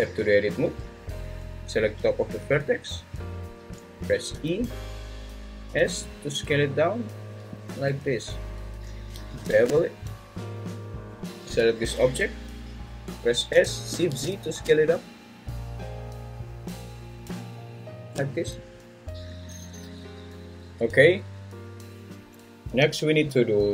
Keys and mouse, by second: 4.3 e, 5.7 s, 9.4 ctrl+b, 11.2 `, 11.5 g, 12.0 Escape, 13.5 s, 14.1 shift+z, 18.0 shift+click, 18.6 click.